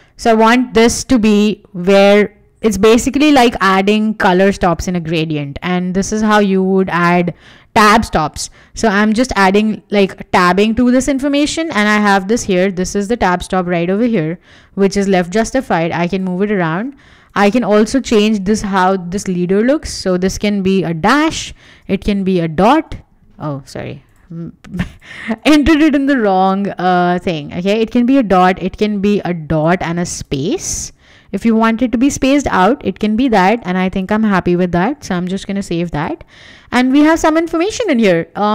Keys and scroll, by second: 10.9 super+z, 18.5 BackSpace, 18.7 -, 19.4 Tab, 21.6 BackSpace, 22.1 ., 22.6 Tab, 26.6 ., 27.1 Tab, 30.1 space, 30.7 Tab, 35.2 Escape.